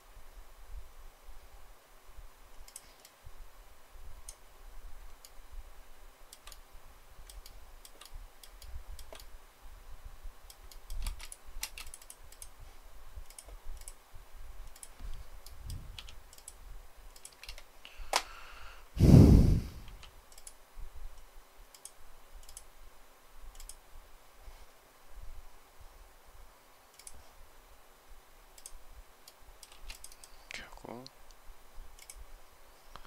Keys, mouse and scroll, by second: 5.1 shift+middle click, 7.3 shift+middle click, 8.4 shift+middle click, 10.5 shift+middle click, 11.5 space, 17.2 space, 17.2 Escape, 29.1 shift+middle click, 29.6 space.